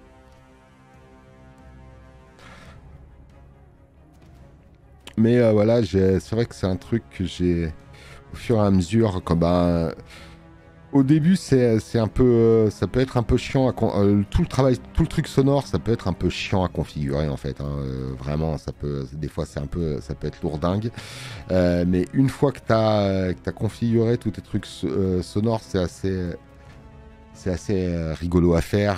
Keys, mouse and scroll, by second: 4.4 space, 4.5 click.